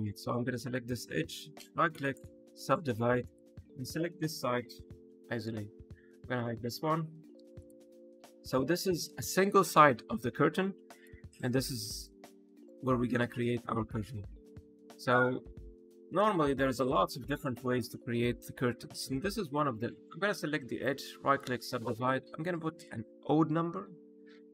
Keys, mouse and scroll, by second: 0.8 right click, 3.2 click, 4.4 p, 5.5 Tab, 5.7 click, 6.3 click, 7.2 h, 7.5 click, 8.0 click, 8.4 middle click, 9.5 click, 10.8 click, 11.3 middle click, 12.2 middle click, 15.0 Tab, 16.1 a, 16.6 middle click, 17.4 scroll down 1, 17.9 shift+middle click, 20.7 right click, 22.8 click.